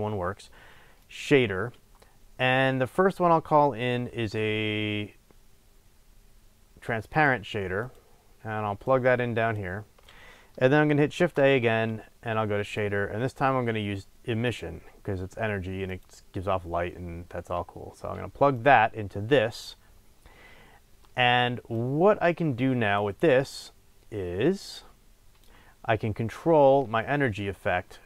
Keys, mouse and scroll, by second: 9.0-15.9 drag, 11.3 shift+a, 18.5 click, 21.0-21.8 middle drag, 21.8 click.